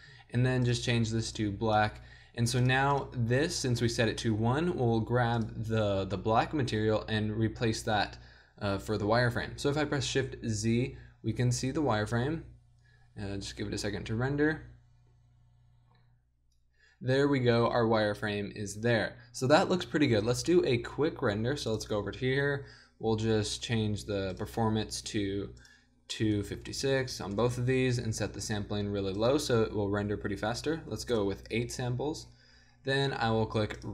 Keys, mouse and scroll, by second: 9.9 shift+z, 20.1 z, 21.7-23.3 middle drag, 23.5-31.6 middle drag.